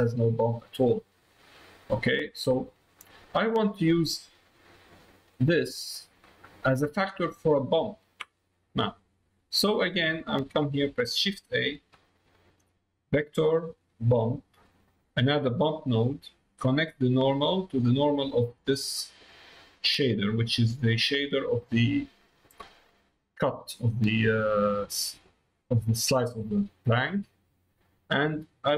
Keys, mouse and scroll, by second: 0.7 middle click, 1.5 middle click, 3.0 click, 4.2 click, 5.3 click, 6.2 middle click, 8.3 middle click, 9.8 middle click, 11.6 shift+a, 16.1 middle click, 17.6-24.6 drag, 24.8 middle click, 26.6 middle click, 27.4 middle click.